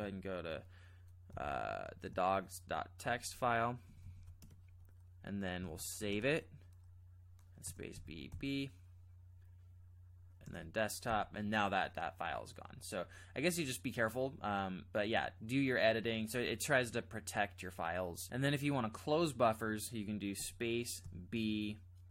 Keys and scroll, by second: 1.3 b, 3.0 ctrl+j, 3.3 ctrl+j, 3.8 ctrl+k, 3.8 typing, 4.0 ctrl+k, 4.4 Return, 5.7-6.5 typing, 7.9 Return, 11.1 space, 20.4 space, 21.1 b.